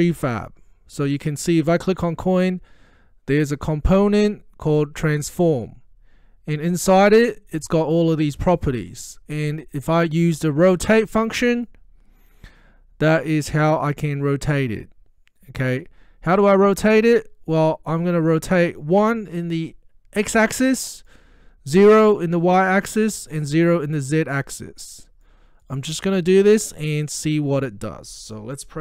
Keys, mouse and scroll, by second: 0.3 click, 0.4 click, 11.6 click, 18.8-21.3 drag.